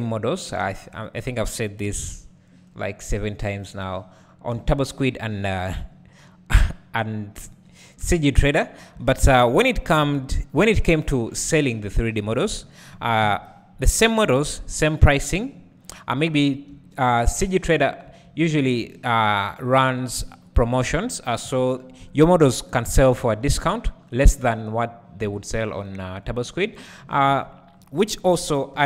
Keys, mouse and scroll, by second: 0.6 3, 1.2 click, 1.8 KP_Decimal, 2.6-4.5 scroll up 1, 4.5 e, 5.6 click, 5.9-9.0 scroll down 1, 9.0 Tab, 10.0 alt+a, 13.3 KP_1, 14.1-15.1 scroll down 1, 15.1 scroll up 1, 16.3-16.7 scroll up 1, 16.7 `, 18.1 Tab, 18.2 Tab, 19.2 shift+click, 21.4 ctrl+l, 23.4 `, 24.7-28.8 drag.